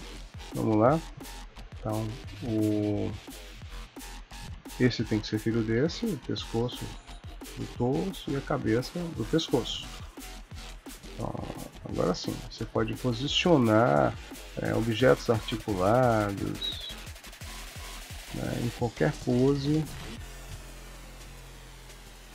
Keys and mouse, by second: 0.3 KP_3, 0.9 shift+middle click, 1.7 ctrl+middle click, 2.4 shift+middle click, 3.0 r, 4.1 click, 4.6 shift+click, 5.7 ctrl+p, 7.9 click, 8.7 shift+click, 9.5 ctrl+p, 11.2 r, 12.5 click, 12.7 r, 14.0 KP_1, 14.9 click, 15.2 r, 16.4 click, 16.7 r, 17.4 click, 17.6 r, 19.1 click, 19.4 r, 20.3 click, 20.7 r.